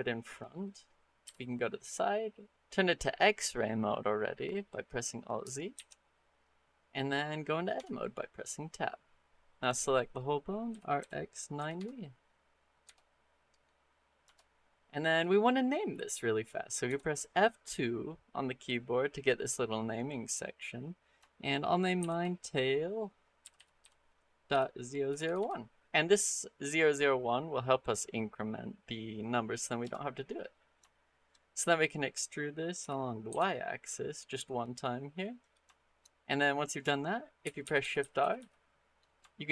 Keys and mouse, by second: 1.1 KP_3, 5.6 alt+z, 7.6 Tab, 10.5 r, 16.7 F2, 25.1 0, 30.7 shift+click, 32.6 e, 35.6 shift+middle click, 37.3-38.2 typing, 39.1 shift+middle click.